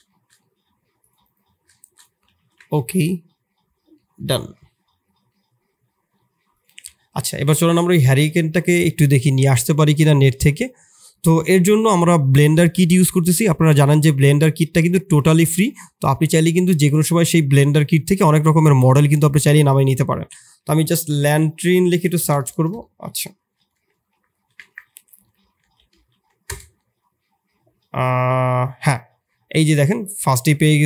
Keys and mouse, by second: 0.0 shift+middle drag, 0.4 middle click, 1.7 shift+middle click, 2.3 ctrl+s, 2.4 ctrl+s, 3.9 middle drag, 5.2 middle drag, 7.3 click, 17.7-30.8 drag, 22.1 BackSpace.